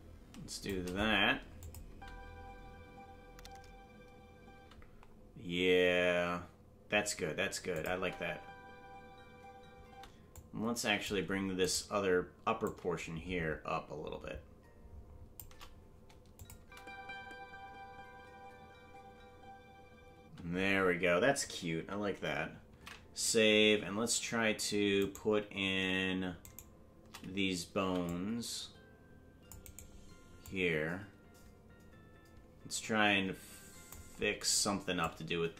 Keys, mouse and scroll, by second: 1.6 click, 2.3 space, 7.7 click, 7.7 space, 7.9 space, 10.3 click, 10.3 space, 11.8 right click, 12.6-15.4 drag, 16.4 click, 16.6 space, 24.6 ctrl+s, 24.6 space, 25.3 right click, 26.7 shift+right click, 27.9 c, 30.4-33.9 drag, 35.0-35.5 drag.